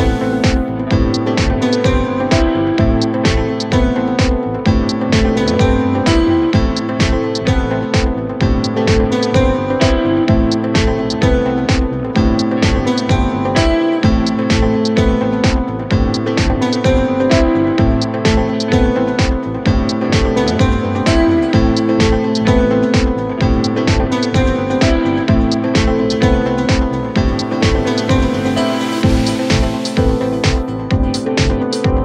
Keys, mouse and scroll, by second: 0.0-4.6 typing, 4.7 scroll down 1, 4.9 middle click, 5.1-6.0 scroll up 4, 6.9-8.5 typing, 8.9 Return, 9.6 scroll down 4, 9.8 middle click, 10.0 scroll up 1, 10.1 scroll down 4, 10.2 middle click, 10.5 scroll up 1, 14.0 scroll down 5, 15.3 scroll down 9, 15.4 middle click, 15.8-16.4 scroll up 6, 17.6 double click, 17.7 double click, 17.8 right click, 20.1 typing, 21.4-22.2 typing, 22.7 middle click, 23.0-23.8 scroll down 3, 23.8 Delete, 24.3 Delete, 26.3 double click, 27.1 typing, 28.4-29.1 typing, 29.4 Return, 30.0 scroll down 1, 30.3 scroll up 4, 30.7 middle click, 31.9-32.0 scroll up 1.